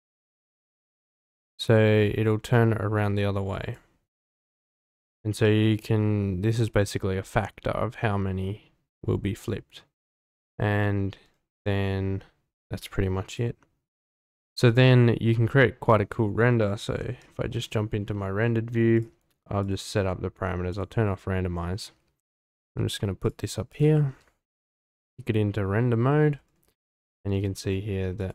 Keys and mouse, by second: 5.4-9.5 drag, 13.3 click, 14.6 click, 15.5-15.9 middle drag, 19.0 click, 19.6 click, 20.7 click, 22.4 g, 22.5 z, 23.7 click, 24.5 z, 27.3 g, 27.4 z, 28.2 click.